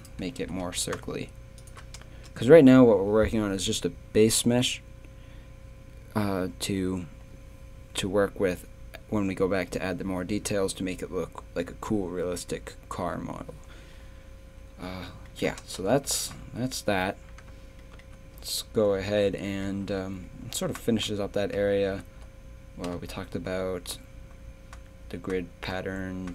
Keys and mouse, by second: 0.4 g, 2.1 Tab, 15.3 middle click, 15.6 Tab, 15.9 z, 18.3 a, 22.0 z, 22.9 z.